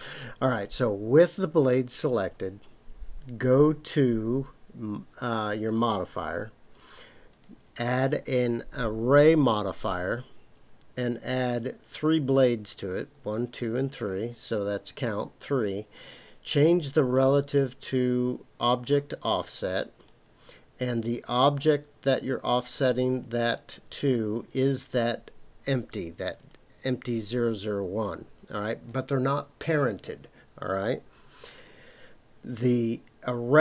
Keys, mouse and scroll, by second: 7.3-9.3 drag, 11.9 click, 17.1 click, 18.7 click, 20.0 click, 22.7-26.5 drag.